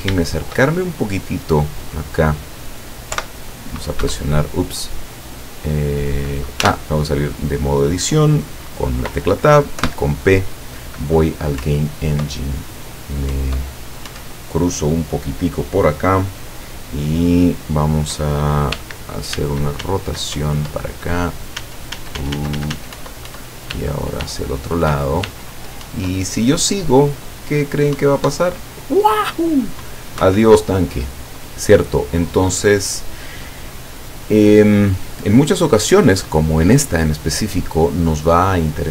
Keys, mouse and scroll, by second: 0.6 shift+scroll down 2, 1.0 shift+middle click, 1.5 shift+scroll down 1, 3.2 p, 4.1 Escape, 6.7 Tab, 9.9 p, 11.7 Up, 13.4 Up, 18.8 w, 19.4 s, 20.4 Up, 21.7 s, 23.1 Up, 23.8 w, 26.0 Up, 28.1 Up, 30.3 Escape.